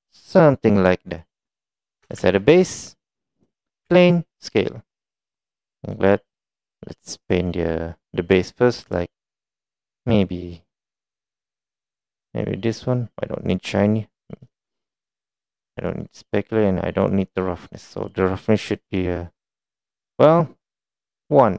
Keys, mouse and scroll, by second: 0.0 click, 0.7-1.1 middle drag, 2.7 click, 3.2 shift+a, 4.8 s, 9.3 drag, 10.2 click, 11.2 click, 16.4-18.0 drag, 19.9-21.4 drag.